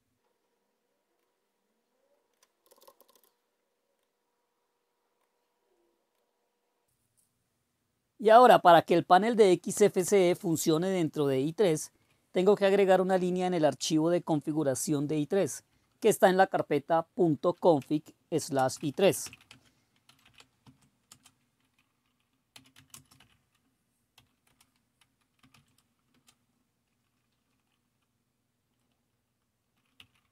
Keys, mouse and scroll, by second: 6.8 super+q, 10.1 super+Return, 13.7 ctrl++, 15.0 ctrl++, 15.4 ctrl++, 15.8 ctrl++, 17.9-21.2 typing, 22.6-28.3 typing, 29.9-30.3 typing.